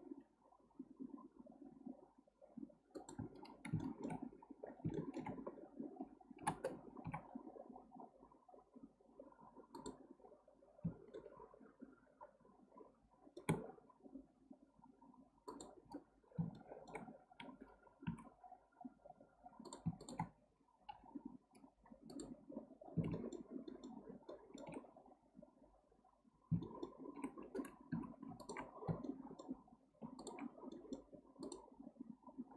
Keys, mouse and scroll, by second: 3.8-4.6 shift+middle drag, 4.6-4.9 scroll down 2, 4.9 shift+middle click, 5.5-5.9 scroll down 1, 6.4 k, 11.1-14.2 shift+middle drag, 16.5-17.3 shift+middle drag, 17.3-18.1 scroll up 1, 18.1 1, 18.5-19.6 scroll up 1, 19.6 click, 20.0 shift+click, 20.9 m, 22.5-23.1 scroll down 4, 23.1-24.8 shift+middle drag, 24.8-26.1 scroll up 1, 26.1 scroll down 2, 26.6-27.9 shift+middle drag, 27.9 2, 28.4 alt+click, 29.1-30.2 shift+middle drag, 30.2 alt+shift+click, 30.7-31.4 shift+middle drag, 31.4 alt+shift+click.